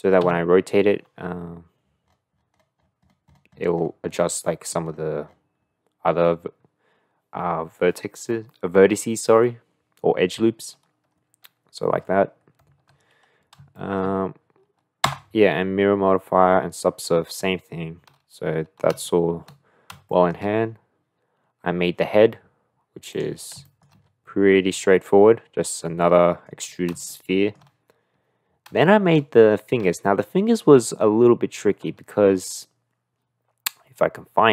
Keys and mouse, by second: 0.2 r, 4.7 click, 13.3 click, 13.7 shift+middle click, 15.1 Tab, 19.1-19.5 shift+middle drag, 20.1 shift+middle drag, 23.6 shift+middle click, 24.8-26.5 middle drag, 27.1 shift+middle click, 28.9 shift+middle click.